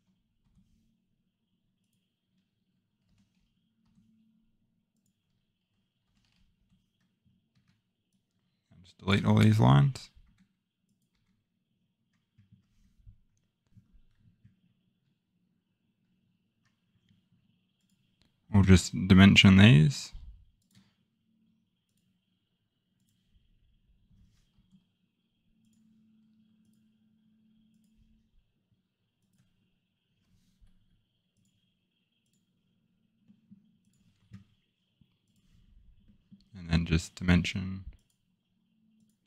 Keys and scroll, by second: 0.4 Return, 6.5 Return, 7.5 Escape, 10.2 Delete, 11.1 Delete, 13.7 Delete.